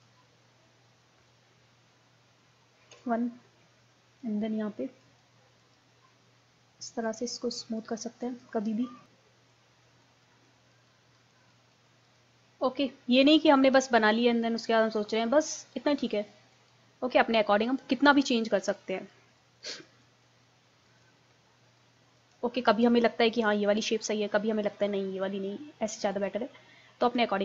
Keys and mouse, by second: 0.9 middle click, 2.9 KP_1, 5.1-6.4 drag, 9.1 middle click, 9.5-12.5 drag, 12.5-18.9 middle drag, 18.9-23.8 drag, 23.8-25.7 middle drag, 25.2 click, 26.1-27.4 drag.